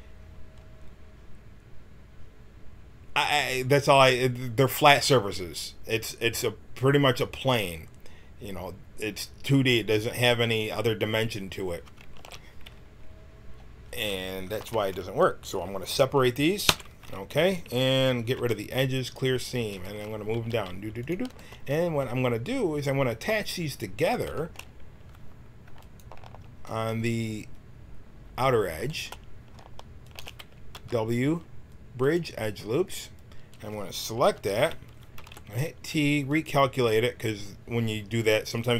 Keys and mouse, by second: 10.5-12.2 drag, 12.2 ctrl+z, 14.5 KP_1, 16.6 y, 18.3 ctrl+e, 20.3 g, 24.0-28.5 drag, 30.0-32.1 drag, 30.7 w, 34.3 l, 35.1 t, 36.3-37.5 drag.